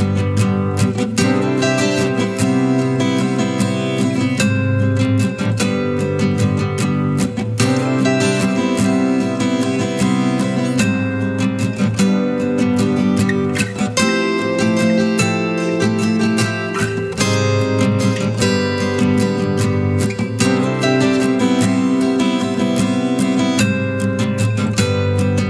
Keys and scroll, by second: 19.9 ctrl+space, 20.5-21.5 ctrl+space, 24.2 ctrl+Return.